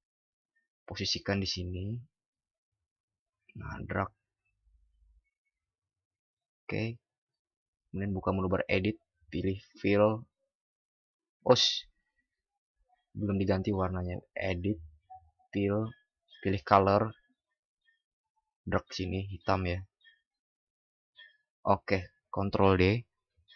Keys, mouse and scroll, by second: 12.4 ctrl+alt+z, 22.4 ctrl+d.